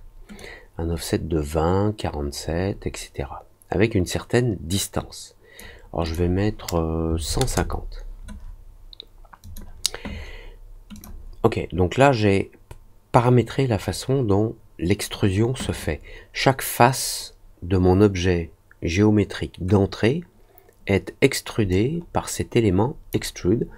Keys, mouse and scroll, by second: 0.3-5.5 drag, 6.0 click, 9.4 click, 10.9 click, 21.6-23.0 drag.